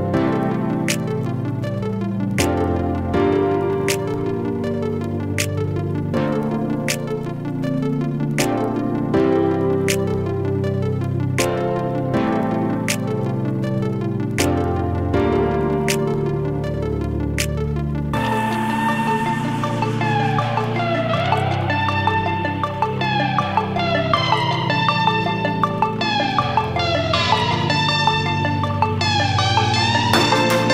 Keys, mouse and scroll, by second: 1.1-2.2 typing, 3.5-4.2 typing, 5.5-6.3 typing, 8.0 click, 17.8 click, 21.4 click, 23.4 click, 27.4 click.